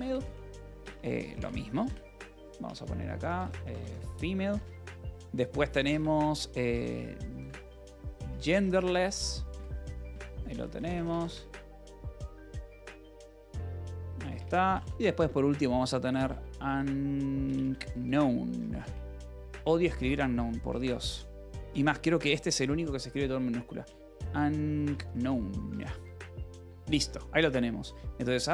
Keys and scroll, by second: 0.0-4.8 typing, 5.0 Return, 5.9 space, 7.0-14.8 typing, 14.3 Return, 16.4-27.1 typing, 26.2 Escape.